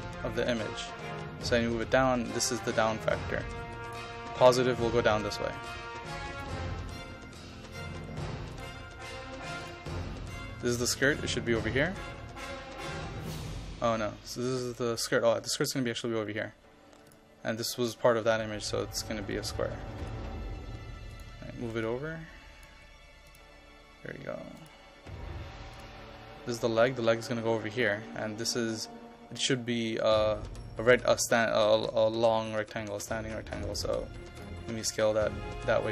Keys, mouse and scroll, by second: 2.7 KP_2, 3.8 click, 18.0-19.6 typing, 18.9 click, 20.1 click, 22.8 KP_5, 23.3-26.8 drag.